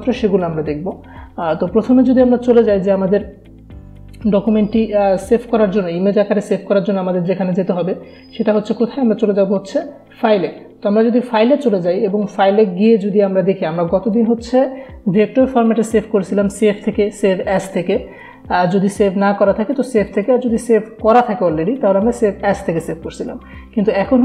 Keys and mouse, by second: 11.7 click.